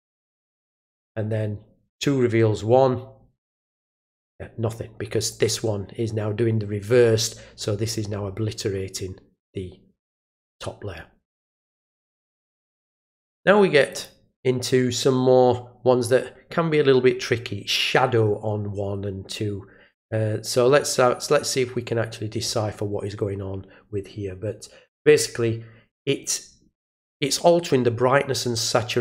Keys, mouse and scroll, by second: 1.9 click, 5.2 click, 12.0 click, 13.9 click, 28.9 click.